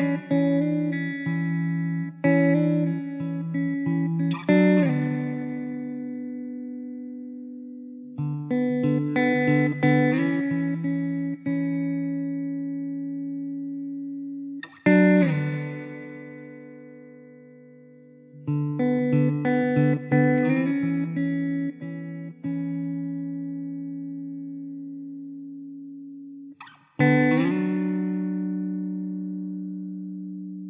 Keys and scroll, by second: 4.2 Tab, 4.7 Tab, 5.5 e, 6.2 Tab, 7.5 ctrl+z, 7.8 ctrl+z, 8.5 Tab, 11.7 ctrl+z, 12.3 s, 12.8 ctrl+z, 13.0 `, 13.4 Tab, 13.6 1, 14.8 Tab, 28.0 Tab, 29.5 Tab, 29.9 Tab, 30.0 Tab, 30.2 `.